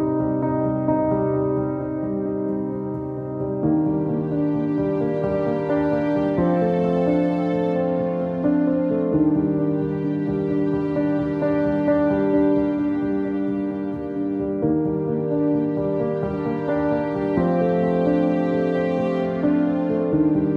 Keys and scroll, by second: 16.0 ctrl+x, 16.6 alt+x.